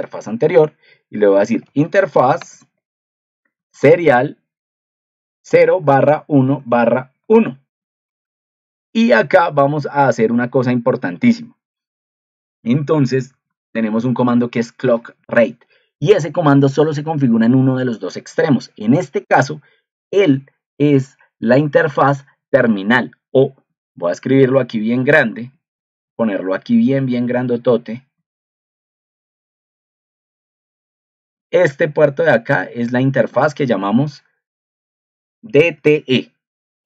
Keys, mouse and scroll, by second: 24.0 ctrl+t, 26.1 ctrl+2.